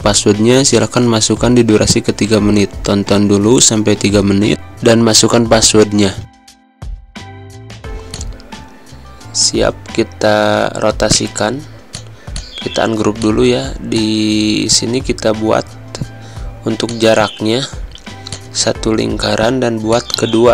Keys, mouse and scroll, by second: 7.8 z, 8.0 click, 8.7 space, 8.8 click, 9.0 space, 9.5 v, 11.1 right click, 11.8 click, 16.5 space, 16.8 click, 17.0 space, 18.3 alt+click.